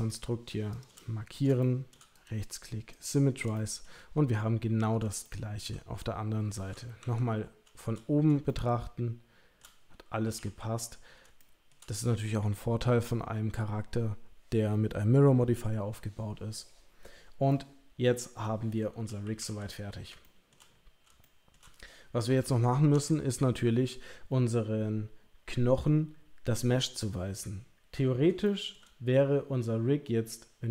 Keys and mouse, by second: 1.6 shift+middle click, 2.2 right click, 3.5 shift+middle click, 5.3 shift+middle click, 7.0 KP_7, 8.5-9.6 shift+middle drag, 10.2 KP_3, 10.3 KP_1, 11.4 shift+middle click, 17.5 middle click, 19.2 KP_3, 19.4 KP_1, 20.2 shift+middle click, 21.2 shift+middle click, 22.9 Tab, 28.4-28.7 shift+middle drag.